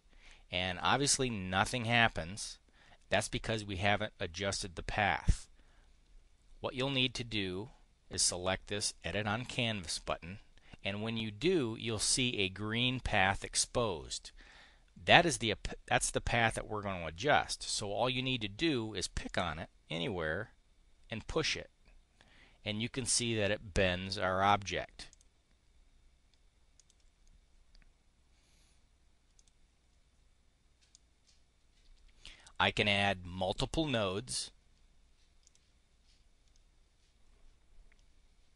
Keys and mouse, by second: 9.9 click, 19.2 click, 25.1 click, 26.7 click, 29.3 click, 30.8 click, 35.3 click.